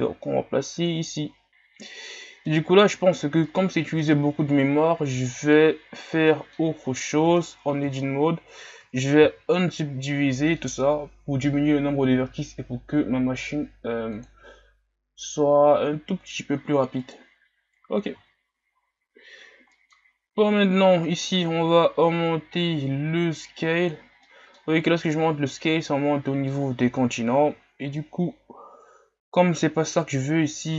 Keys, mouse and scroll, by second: 1.0 click, 2.0-5.4 middle drag, 5.4-6.3 drag, 6.3-6.9 middle drag, 6.9-7.7 scroll up 1, 7.7 Tab, 8.0-9.2 shift+scroll up 6, 17.3-18.3 drag, 18.3 Tab, 18.9 scroll down 3, 21.2-24.3 drag, 24.3 middle click, 24.6-25.2 scroll up 2, 25.2-30.7 middle drag.